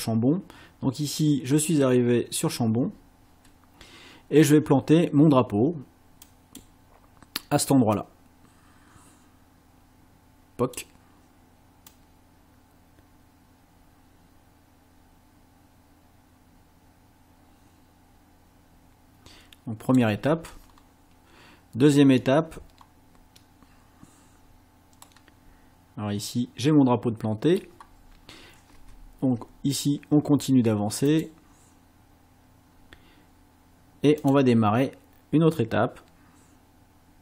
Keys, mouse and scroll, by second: 6.3 click, 7.9-10.9 drag, 11.9-20.2 drag, 20.7 scroll up 1, 22.8-23.6 scroll up 3, 25.0-27.8 middle drag, 28.8 space, 31.1 click, 34.2 click.